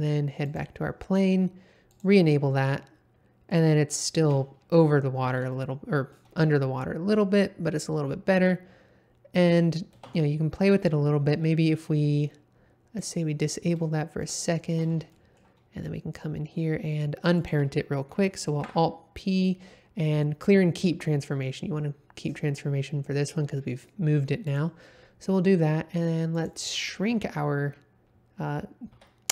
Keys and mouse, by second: 1.9 click, 2.7-3.5 middle drag, 4.2 space, 5.5-6.1 shift+middle drag, 9.9 space, 10.2 shift+middle click, 13.0 click, 13.9-14.2 middle drag, 14.4 shift+middle drag, 15.1 middle click, 17.4 click, 18.6 alt+p, 28.9 s.